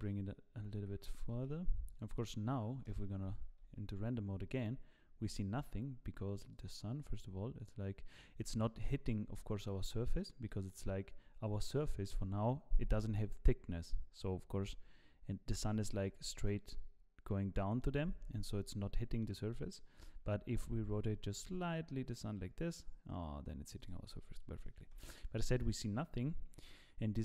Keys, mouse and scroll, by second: 0.8 g, 2.1 middle click, 2.9 KP_0, 3.6 z, 6.7 click, 8.8 middle click, 9.5 scroll down 5, 9.8 middle click, 10.5 middle click, 11.8 KP_7, 16.4 middle click, 18.2-19.2 scroll down 4, 18.5 middle click, 19.5 middle click, 19.9-20.9 scroll up 1, 20.9-21.4 scroll up 2, 20.9 r, 24.1 middle click, 24.9 KP_0.